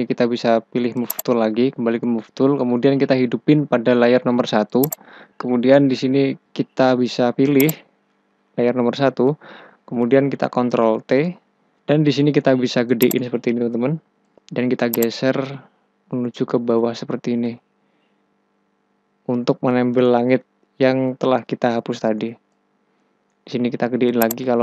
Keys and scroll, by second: 10.8 ctrl+t.